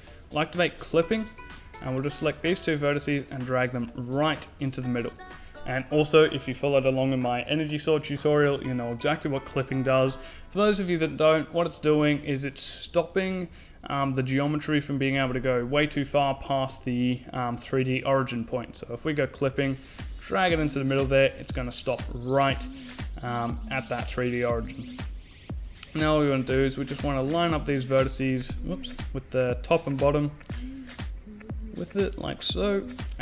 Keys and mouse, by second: 1.0 click, 1.9 middle click, 2.9 click, 3.3 right click, 4.0-5.1 drag, 12.8 click, 13.3 right click, 14.4 click, 18.7-20.0 drag, 20.1 right click, 21.9-23.0 right drag, 23.0 middle click, 26.0 right click, 26.8 middle click, 27.7 right click, 27.8 shift+c, 28.7 middle click, 29.6 click, 31.2 click, 32.0 a.